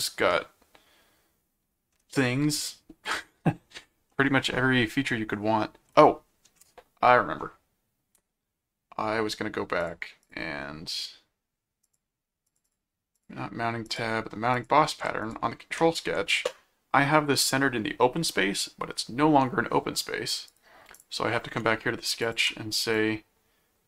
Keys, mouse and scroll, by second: 4.1-5.8 middle drag, 9.8 click, 11.8 click, 12.5 click, 13.8 click, 14.5 click, 15.2 ctrl+click, 15.8 ctrl+1, 20.5 right click, 21.0 click, 22.2 click, 22.9-23.8 drag.